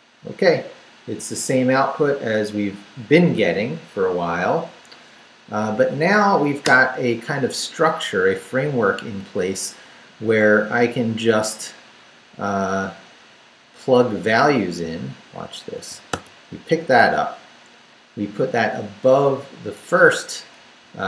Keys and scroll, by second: 6.7 Return, 8.4 Up, 8.9 Down, 9.9 Up, 10.6 Left, 15.7 d, 16.7 Up, 17.7 Up, 20.1 Up, 20.5 Down.